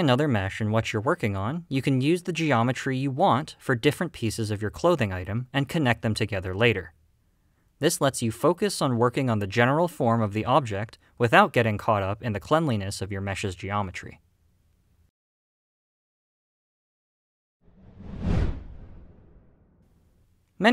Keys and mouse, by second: 0.2 3, 1.2 shift+middle click, 1.7 middle click, 2.1 middle click, 2.1-3.6 typing, 2.6 middle click, 2.7 middle click, 3.0 click, 3.3 middle click, 3.6 middle click, 4.1 ctrl+z, 4.2 ctrl+f, 4.3 ctrl+click, 4.5 ctrl+r, 4.6 middle click, 4.8 ctrl+r, 5.0 g, 5.5 click, 5.7 middle click, 5.8 middle click, 6.1-12.4 typing, 6.3 middle click, 6.5 middle click, 6.6 middle click, 7.3 click, 7.7 drag, 7.8 click, 8.2 click, 8.3 click, 8.7 click, 8.8 click, 8.9 click, 9.1 click, 9.3 click, 9.9 middle click, 10.4 middle click, 10.6 click, 11.0 middle click, 11.2 click, 11.2 middle click, 12.2 click, 12.4 click, 12.5 middle click, 12.7 alt+a, 12.7 shift+right click, 13.1 middle click, 13.3 click, 13.7 middle click, 13.7-18.2 typing, 13.8 click, 13.9 drag, 14.0 middle click, 14.2 middle click, 14.3 ctrl+r, 14.4 middle click, 15.3 click, 15.6 click, 15.8 click, 16.5 click, 17.3 click, 17.5 click, 17.6 click, 17.8 click, 18.0 click, 18.2 click.